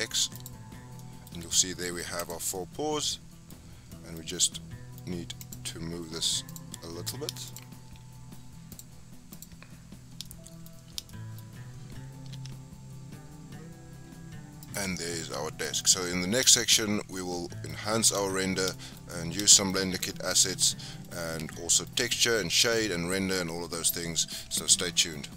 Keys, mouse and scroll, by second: 0.7 scroll down 5, 1.0-2.2 middle drag, 2.2 click, 2.5-5.4 middle drag, 5.4 click, 6.5 click, 7.4 shift+click, 8.7 click, 9.3 click, 9.9-10.2 scroll up 3, 10.2-10.7 shift+middle drag, 10.7-11.1 scroll up 4, 11.1-11.4 shift+middle drag, 11.4-12.3 scroll up 2, 12.3 g, 14.9 scroll down 6, 15.2-15.8 middle drag, 15.8 scroll down 5, 16.0 middle click, 17.0 scroll down 1, 17.1-17.9 middle drag, 17.9 scroll up 1, 18.0 click, 18.7 shift+middle drag, 18.9-19.4 scroll up 3, 19.4-24.2 shift+middle drag.